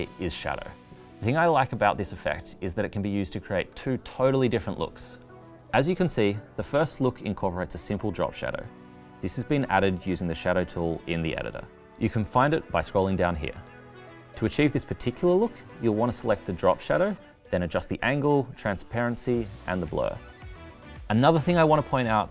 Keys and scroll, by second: 10.1 super+c, 11.0 super+v.